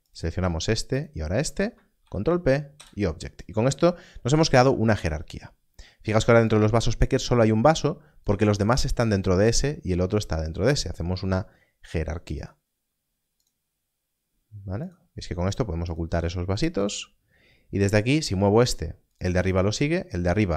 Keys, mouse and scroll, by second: 0.1 click, 0.9 shift+click, 2.0 ctrl+p, 2.7 Return, 6.4 Return, 11.8 click, 18.1 click, 19.1 g, 19.1 right click, 19.5 click, 19.6 g.